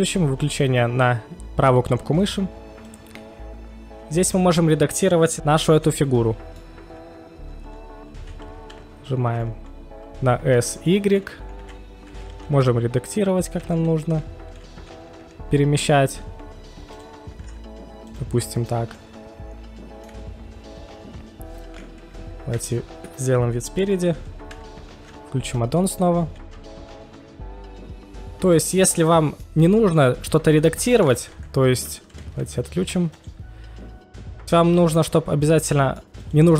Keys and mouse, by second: 2.8 click, 5.8-6.6 middle drag, 8.2 s, 8.6 s, 8.7 y, 10.8 click, 11.6 KP_1, 12.5 KP_1, 13.5 f, 13.6 d, 15.2 g, 17.0 click, 17.5 s, 18.1 click, 18.1 z, 18.4-18.7 middle drag, 20.0 middle click, 22.5 KP_1, 24.9 ctrl+shift+x, 28.5-30.8 middle drag, 29.5 KP_1, 31.2 middle drag, 31.7 KP_1, 33.0 KP_1, 33.1 drag, 33.4 right click, 33.7 click, 34.3 ctrl+shift+x.